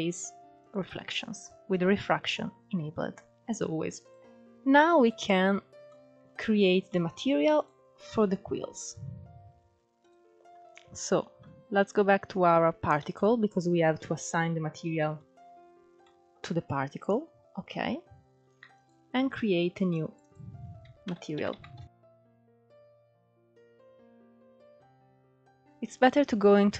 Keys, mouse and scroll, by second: 0.1 click, 2.4-3.5 scroll up 5, 3.5 click, 4.2 scroll down 3, 4.6 click, 5.1 scroll down 2, 5.3-6.0 middle drag, 6.0 scroll down 2, 6.3-7.0 shift+middle drag, 7.0 click, 7.7 scroll up 3, 9.4 click, 10.3 click, 10.7 scroll down 1, 10.8-12.4 middle drag, 12.4 KP_Decimal, 13.2 scroll down 1, 13.4-14.4 middle drag, 14.4 scroll down 2, 14.6-15.3 shift+middle drag, 15.3 scroll down 2, 15.4-18.1 shift+middle drag, 18.1-21.2 drag, 21.2 `, 22.1 BackSpace, 22.4 l.